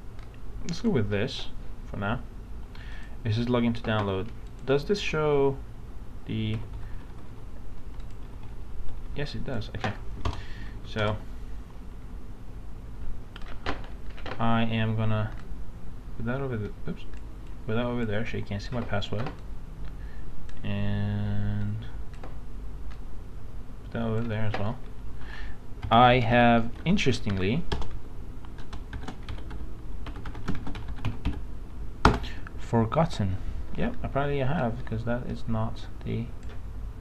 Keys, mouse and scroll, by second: 0.8-1.8 drag, 6.5-8.6 typing, 8.0 click, 10.3 BackSpace, 11.0 shift+BackSpace, 15.4 click.